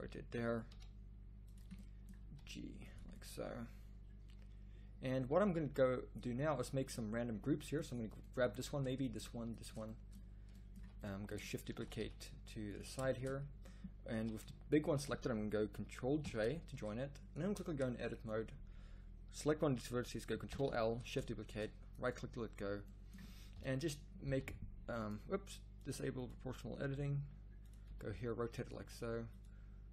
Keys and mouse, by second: 0.6 s, 2.2 g, 5.4 a, 8.4 z, 10.7 z, 11.7 shift+d, 14.1 z, 16.2 ctrl+j, 16.7 z, 17.4 Tab, 20.5 ctrl+l, 21.5 shift+d, 23.5 KP_1, 24.2 r, 26.9 g, 27.9 r, 28.8 g.